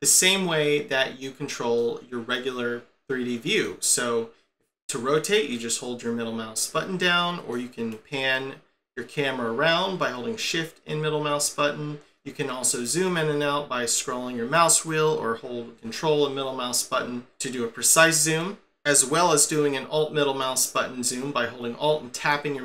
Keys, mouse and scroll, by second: 1.8 middle click, 5.5 middle click, 13.3-13.6 scroll down 4, 13.9-15.3 scroll up 5, 15.9 ctrl+middle click, 22.2 alt+middle click.